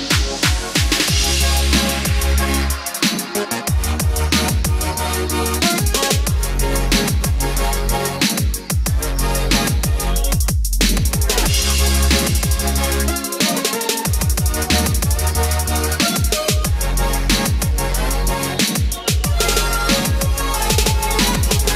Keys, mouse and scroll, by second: 3.6 KP_1, 6.9-11.6 drag, 17.0 Tab, 18.6 click.